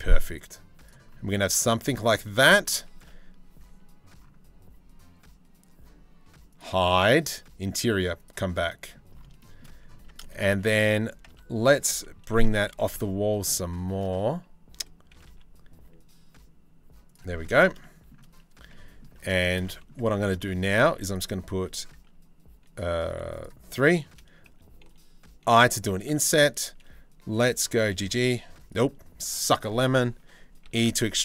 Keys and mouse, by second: 0.8 Tab, 2.4 3, 7.7 middle click, 8.2 middle click, 9.0 shift+middle click, 9.6 Tab, 9.8 shift+middle click, 10.4 a, 10.9 Tab, 11.9 g, 17.0-17.7 shift+middle drag, 18.3-18.6 middle drag, 18.9 shift+middle drag, 19.2 middle click, 19.7 Tab, 19.9 shift+middle click, 20.4 4, 22.6 3, 25.0 i, 27.4 g, 30.2 e.